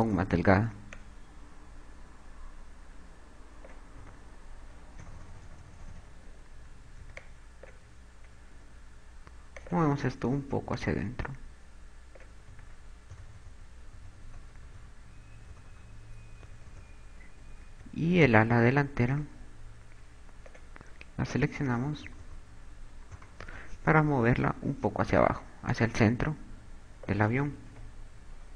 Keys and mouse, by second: 0.4 click, 1.7 click, 4.8-7.6 typing, 9.8 click, 10.3 click, 13.3-14.8 typing, 17.2 KP_8, 17.4 KP_4, 18.4 b, 20.2 KP_4, 22.2-24.4 typing, 26.5 click, 28.4 ctrl+z.